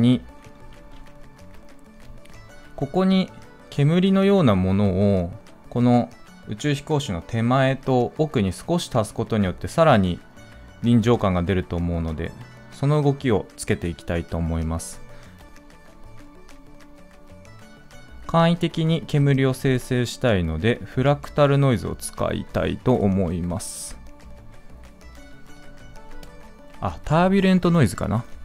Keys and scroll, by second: 0.6 ctrl+s.